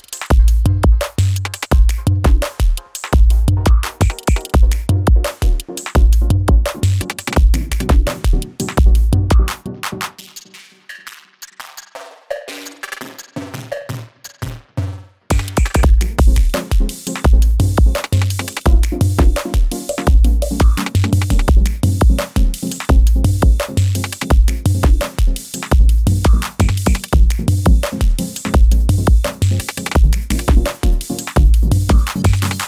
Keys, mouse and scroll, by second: 0.0 typing, 1.2-4.8 drag, 8.2 k, 9.3 click, 10.4 j, 11.6-17.6 drag, 17.6 F9, 18.1 space, 21.3 click, 23.7-25.6 drag, 26.0 ctrl+c, 26.8 click, 27.5 ctrl+v, 28.0 u, 28.5 space, 32.3-32.6 drag.